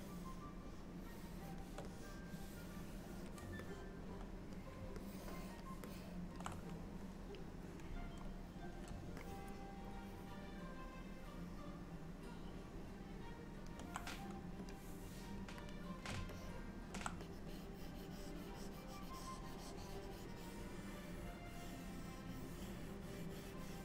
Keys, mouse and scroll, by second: 0.0 click, 2.0 click, 3.7 middle click, 5.1 ctrl+middle click, 5.9 middle click, 9.3 middle click, 14.8 click, 16.0 click, 16.4 alt+middle click, 17.3 click, 17.6 click.